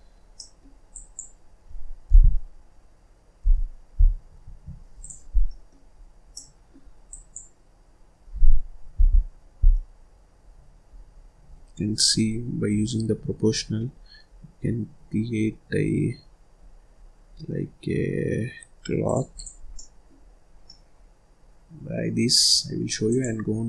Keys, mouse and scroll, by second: 0.3 middle click, 0.9 click, 2.0 g, 4.9 click, 5.3 scroll down 1, 5.4 middle click, 5.9-6.3 scroll up 1, 6.3 middle click, 7.0 click, 8.8 g, 19.3 click, 19.6 scroll down 1, 19.7 middle click, 20.2 scroll up 2, 20.4 scroll down 1, 20.6-23.0 middle drag, 23.0-23.6 drag.